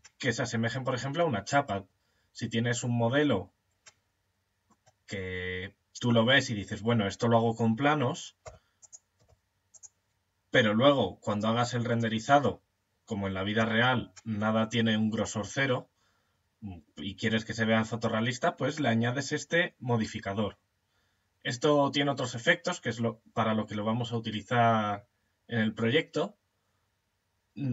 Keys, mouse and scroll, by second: 7.8 e, 8.6 e, 13.0 Tab, 13.8-16.2 middle drag.